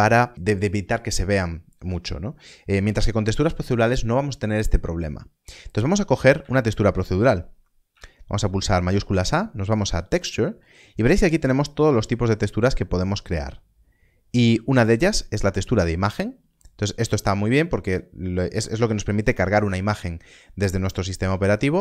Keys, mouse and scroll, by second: 7.3-7.8 scroll up 1.